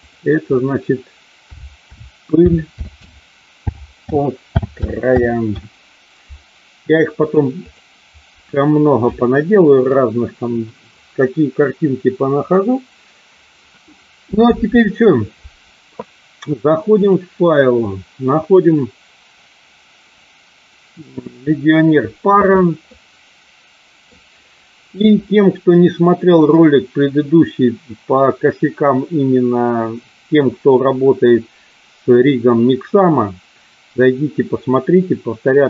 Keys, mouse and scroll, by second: 17.0-21.6 drag, 22.9-24.1 middle drag.